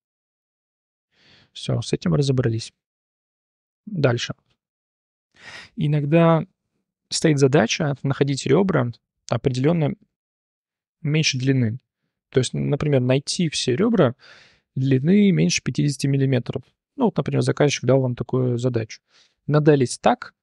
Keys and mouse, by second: 0.3 shift+drag, 1.1 Tab, 1.4 click, 2.2 h, 2.7 /, 4.2 click, 4.4-4.7 drag, 5.0 click, 6.2 shift+click, 9.1-18.7 drag, 18.9-19.3 drag, 19.7 click, 20.0-20.4 drag.